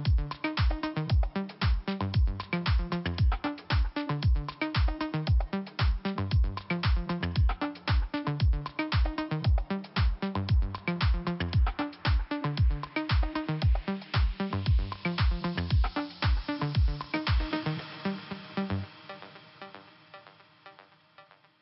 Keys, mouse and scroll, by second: 1.4 click, 1.5 click, 2.0 click, 2.1 click, 2.4 right click, 2.6 right click, 3.1 click, 3.2 click, 4.3 click, 4.4 click, 5.9 click, 6.0 click, 7.7 click, 8.5 right click, 10.1 click, 10.4-11.3 scroll up 2, 13.3 click, 14.5 click, 16.2 click, 16.2 click, 16.7 click, 18.5 click, 18.6 click, 19.0 click, 20.9 click, 21.0 click, 21.5 click.